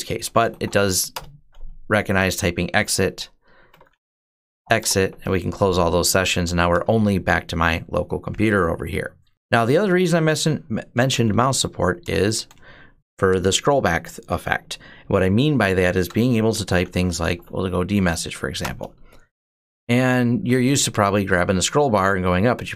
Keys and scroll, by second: 0.0-0.9 typing, 2.5-4.9 typing, 5.9-6.8 typing, 9.3 BackSpace, 10.5-11.6 typing, 11.8 Return, 16.2-17.5 typing, 18.4 Return.